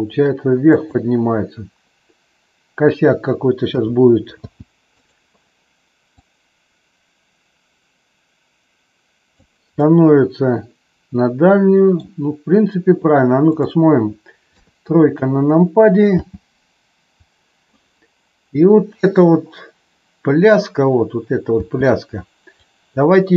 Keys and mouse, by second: 0.6 drag, 3.6 a, 4.3 i, 6.2-9.5 drag, 9.7-11.9 middle drag, 14.5 KP_3, 16.1 space, 21.6 space, 22.6-23.3 drag.